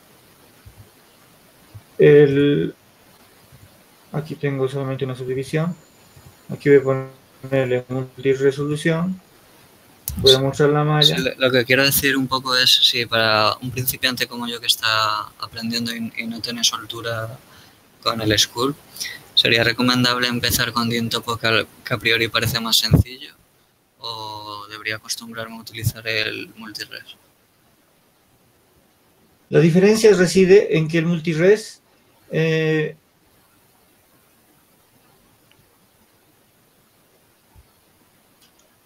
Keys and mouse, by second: 0.9 Tab, 1.9 Tab, 10.0 shift+z.